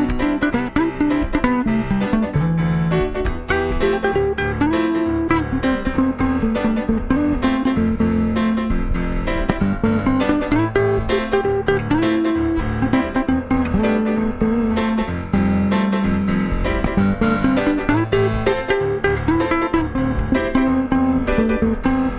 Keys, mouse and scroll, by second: 0.8 typing, 1.8-3.6 drag, 3.7-4.0 typing, 4.0-13.6 drag, 13.9-15.9 drag, 18.4-19.9 drag, 20.9-22.1 drag.